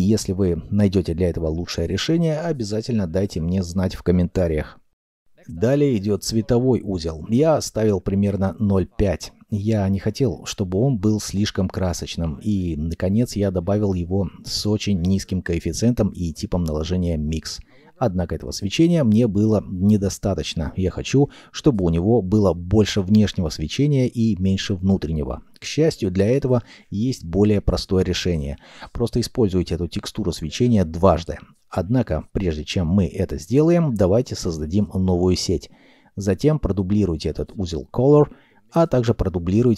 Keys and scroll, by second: 12.0 shift+a, 12.7 m, 12.8 i, 13.1 x, 18.1 ., 18.6 8, 18.6 0, 18.7 Return, 30.2 ctrl+j, 32.3-33.6 typing, 34.2 ctrl+z.